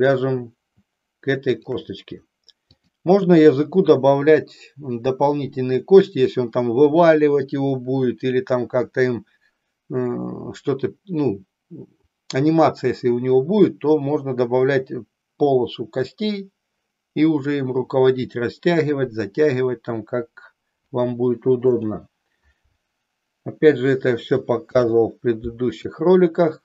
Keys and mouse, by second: 2.7-22.0 drag, 24.5 ctrl+p.